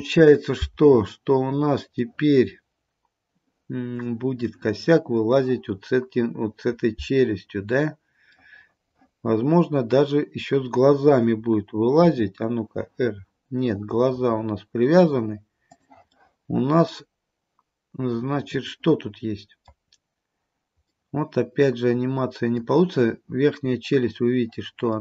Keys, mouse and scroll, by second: 1.5-2.1 scroll up 2, 2.1 middle click, 4.4 middle click, 8.5 middle click, 12.1 r, 16.2 middle click, 17.2 middle click, 20.0-20.5 scroll up 2, 21.0 middle click, 21.1 middle click, 23.8 scroll down 1.